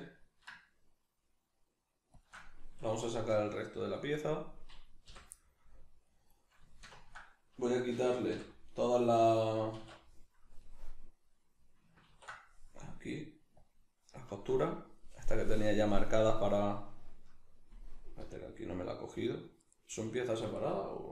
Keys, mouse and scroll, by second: 2.2 shift+click, 3.3 alt+g, 4.2 right click, 5.1 l, 5.4-19.6 middle drag, 8.3 l, 9.8 alt+e, 12.0 ctrl+e, 18.2 l, 19.6 right click, 19.9 l, 20.4 right click.